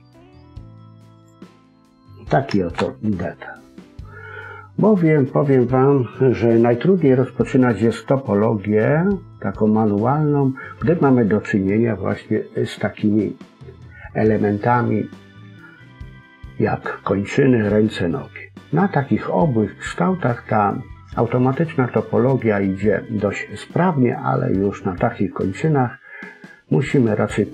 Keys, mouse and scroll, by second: 1.4 middle click, 2.7 KP_1.